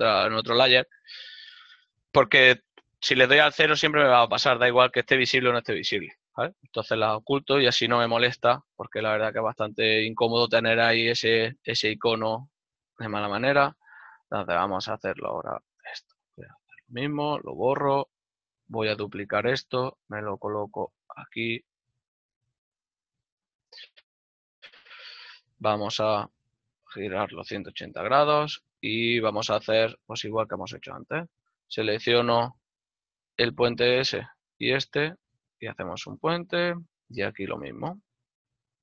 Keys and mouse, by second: 3.5 KP_0, 7.2 middle click, 9.6 right click, 11.3 Tab, 13.5 middle click, 14.3 ctrl+Tab, 15.2 alt+right click, 17.2 click, 17.9 right click, 18.6 l, 26.6 z, 29.3 middle click, 31.1 alt+right click, 32.0 z, 32.6 click, 33.6 middle click, 34.3 alt+shift+right click, 34.7 w, 36.2 click, 37.1 shift+middle click, 38.3 alt+right click.